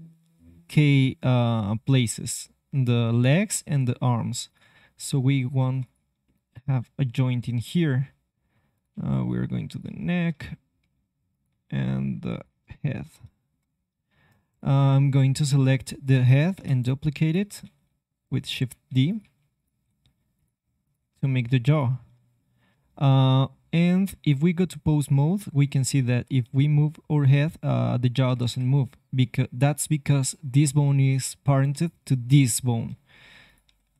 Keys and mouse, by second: 4.4-6.9 drag, 5.3 g, 6.9-8.1 middle drag, 7.7 e, 8.9 e, 10.7 g, 11.4 e, 12.7 click, 13.5 middle click, 14.5-16.5 drag, 16.5 shift+d, 18.5-21.2 typing, 21.7 click, 23.2 ctrl+Tab, 26.2 r, 28.4 Escape, 33.4 click, 33.7 r.